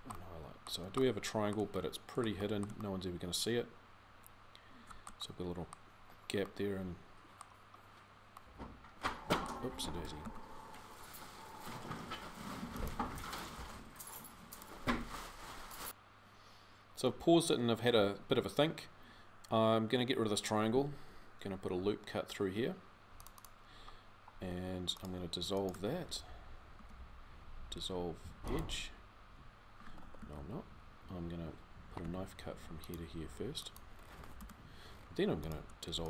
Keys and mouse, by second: 10.0 ctrl+z, 21.4 ctrl+r, 23.9 click, 24.7-26.6 right drag, 26.6 x, 29.9 ctrl+z, 31.8 k.